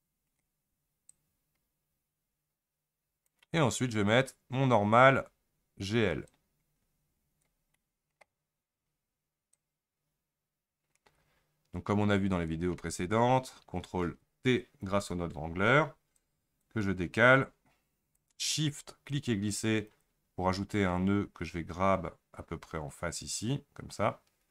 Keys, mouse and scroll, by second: 7.5 click, 9.6-19.9 drag, 19.9 shift+right click, 22.1 g.